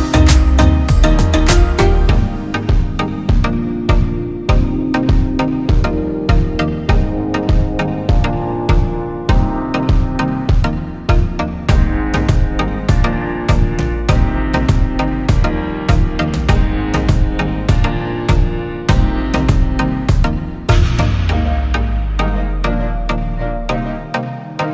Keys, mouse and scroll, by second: 0.4-3.2 drag, 3.2 F3, 4.0 click, 4.4 Escape, 4.8 click, 6.4 Escape, 7.2 F3, 7.6 Escape, 7.9 click, 8.6 ctrl+z, 9.3 ctrl+k, 9.9 Escape, 10.5 click, 12.3 l, 13.0 Escape, 13.7 click, 14.2 Escape, 14.5 click, 15.3 shift+Page_Down, 15.6 Escape, 16.1 click, 16.4 Delete, 17.4 click, 18.2 click, 20.3 click, 20.6 Escape, 21.2 click, 22.2 shift+click, 23.0 r, 23.2 Escape, 23.9 click, 24.6 click.